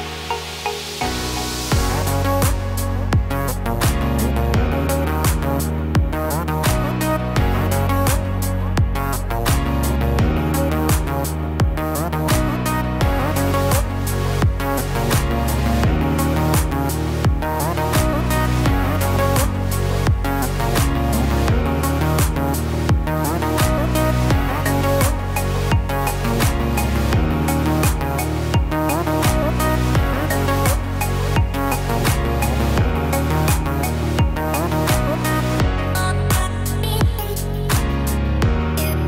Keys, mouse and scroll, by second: 2.0 alt+h, 3.3 scroll down 3, 4.2-4.7 scroll down 3, 4.7 scroll up 3, 6.5 KP_3, 8.2 g, 10.4 click, 11.3 click, 13.0 g, 17.4 middle click, 19.4 KP_1, 21.1-21.6 scroll up 4, 22.9 Tab, 24.5 click, 25.1-25.7 scroll down 3, 25.5 middle click, 29.2 r, 32.1 e, 35.0 middle click, 37.0 e.